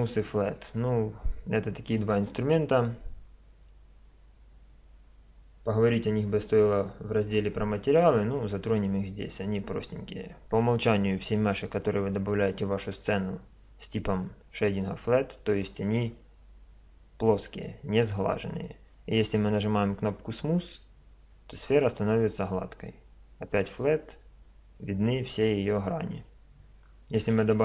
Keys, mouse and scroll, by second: 20.3-22.3 drag, 23.5-25.5 drag, 26.9-27.6 middle drag.